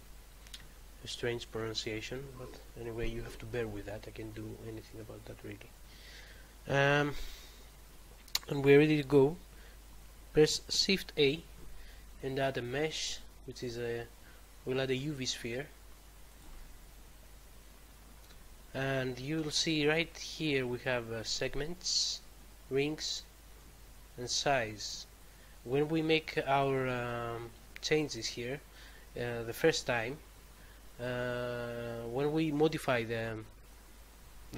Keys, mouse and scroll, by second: 11.2 a, 16.2 click, 26.6 click.